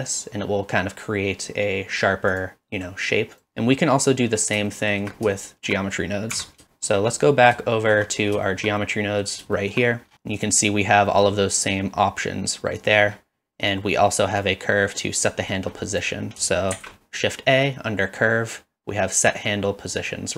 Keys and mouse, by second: 2.3 ctrl+click, 4.7 shift+middle click, 5.4 shift+middle click, 6.3 Tab, 7.1 click, 7.6 middle drag, 8.4 shift+middle drag, 8.8-9.2 middle drag, 9.6 shift+middle click, 10.5-13.0 drag, 13.7 click, 14.4 click, 15.6 middle click, 16.0 click, 16.7 shift+a.